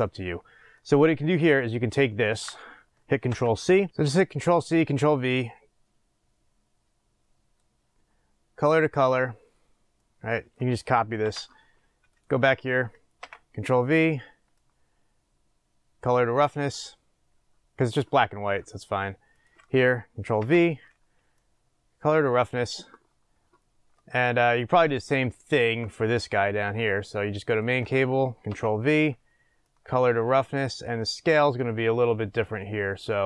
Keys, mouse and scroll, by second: 5.0-6.5 drag, 9.7 scroll down 1, 12.0 click, 13.2 ctrl+v, 16.0 click, 18.1-19.3 scroll down 1, 19.3 click, 20.3 ctrl+v, 22.6 click, 25.2-27.7 shift+middle drag, 27.7 click, 28.5 ctrl+v, 30.8 click, 31.7-33.2 middle drag.